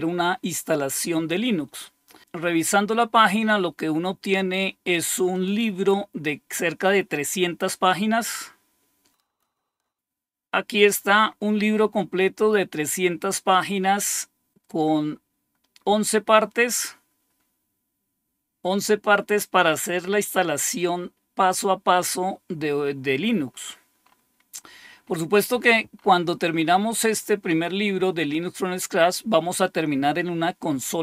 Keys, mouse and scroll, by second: 2.6 scroll down 2, 3.4 scroll up 2, 5.3 click, 5.9 click, 8.3-9.4 scroll down 1, 9.4 click, 9.8-11.2 scroll down 2, 11.2-12.6 scroll up 2, 13.4-15.6 scroll down 3, 23.4-27.6 scroll up 3, 27.6-29.5 scroll down 3.